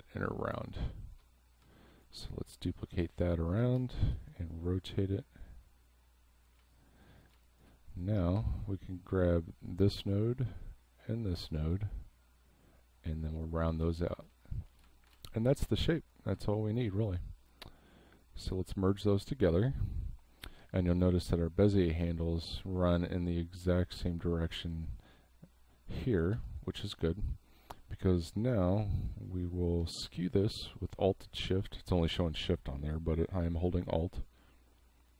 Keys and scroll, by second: 0.6 space, 3.8 space, 6.6 space, 8.4 a, 13.8 v, 14.3 space, 15.1 space, 16.8 space, 20.6 a, 26.3 v.